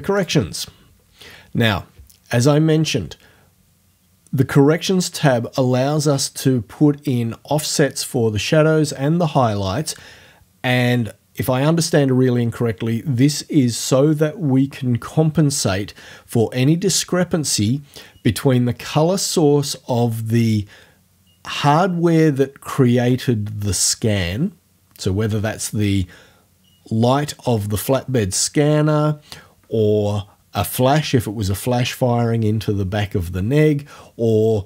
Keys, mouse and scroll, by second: 0.2 click.